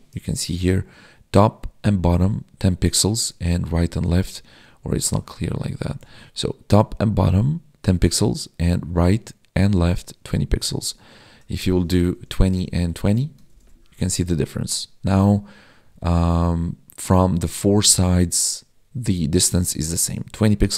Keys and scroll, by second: 13.5 ctrl+s.